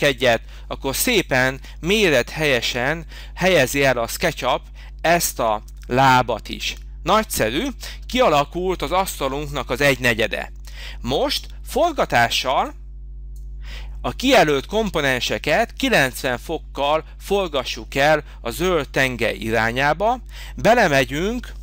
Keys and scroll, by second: 1.0 space.